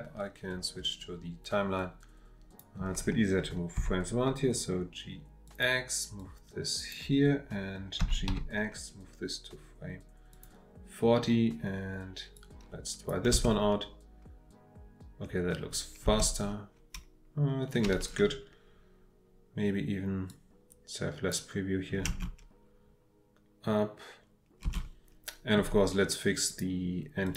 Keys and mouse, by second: 1.8-2.7 drag, 3.8 g, 5.5 click, 6.2-6.9 drag, 8.0 g, 8.3 x, 10.3 click, 12.4-13.1 drag, 13.3 space, 16.1 space, 20.3-21.4 drag, 22.1 space, 24.6 space, 27.2 click.